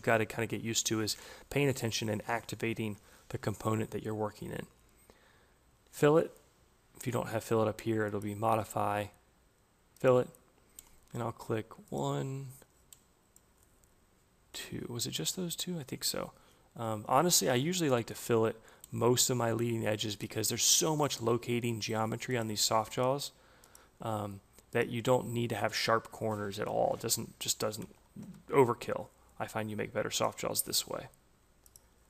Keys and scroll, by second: 26.2 Delete, 26.8 2, 27.6 shift+Left, 28.1 Tab.